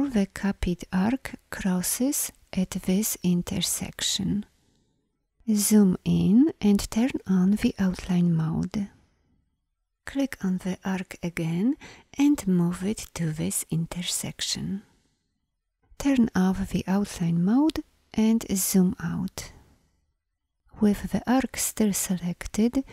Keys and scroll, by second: 5.3-6.3 alt+scroll, 7.6 ctrl+y, 15.7 ctrl+y, 18.4 ctrl+0.